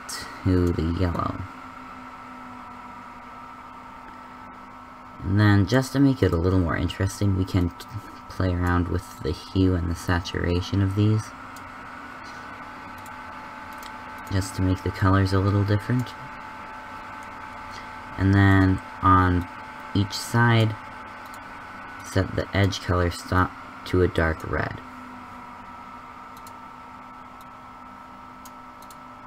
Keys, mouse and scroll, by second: 13.1 click, 18.4-21.2 middle drag.